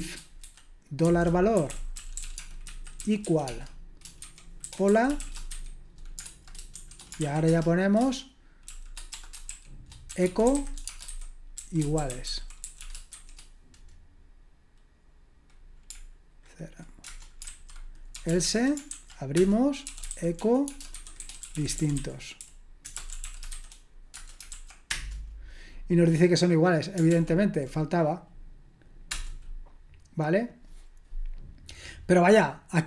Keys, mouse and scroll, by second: 0.0-7.5 typing, 8.7-13.6 typing, 17.4-24.9 typing, 27.1 ctrl+p.